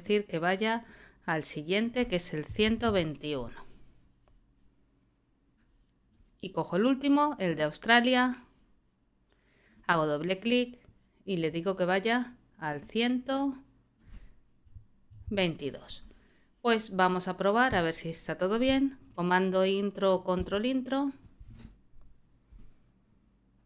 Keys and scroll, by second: 2.2-3.3 typing, 14.6 l, 15.1 2, 20.4 super+Return.